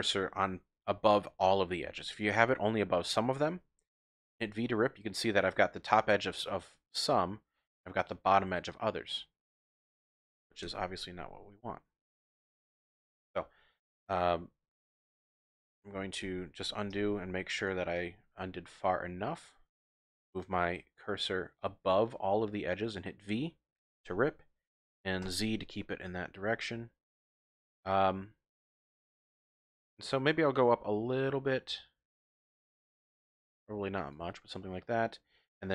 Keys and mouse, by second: 0.4 typing, 4.1 v, 9.8 click, 10.6 ctrl+z, 16.2 ctrl+z, 17.6 shift+click, 17.9 typing, 21.0 shift+click, 23.9 v, 25.2 z, 34.0 click, 34.7 click, 34.8 middle click.